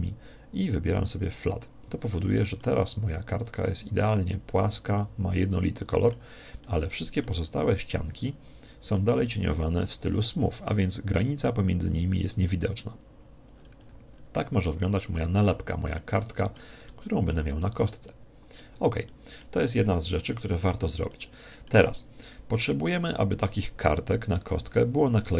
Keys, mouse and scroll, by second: 0.1-1.2 scroll down 1, 1.2 click, 1.2 scroll down 1, 2.6-4.3 middle drag, 5.0-10.3 middle drag, 9.9 Tab, 13.5-22.7 middle drag, 23.3 right click.